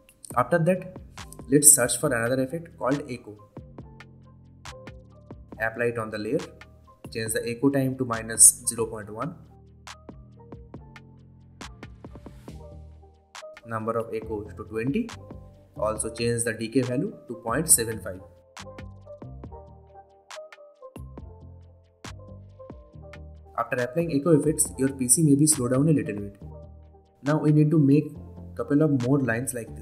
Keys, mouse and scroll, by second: 4.3-5.6 typing, 6.6 click, 11.9 BackSpace, 13.7 click, 14.3 click, 15.5 Return, 17.0 click, 19.8 BackSpace, 22.1 BackSpace, 22.6 Return, 24.5-28.8 drag.